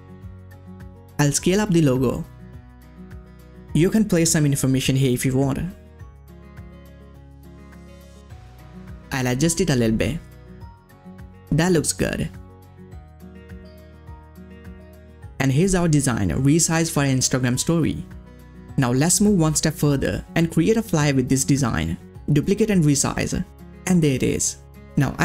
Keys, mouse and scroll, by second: 0.3 space, 0.6-2.7 drag, 2.7 ctrl+scroll down 1, 6.1 click, 6.9 ctrl+scroll up 2, 7.6-10.5 drag, 12.5 ctrl+scroll down 1, 13.2-14.4 ctrl+scroll up 1, 14.5 click, 15.5-16.0 ctrl+scroll up 1, 16.0 scroll down 1, 16.1-16.7 ctrl+scroll up 1, 16.7-17.3 ctrl+scroll down 1, 17.4-17.7 scroll up 1, 20.3 scroll up 1, 20.4 click.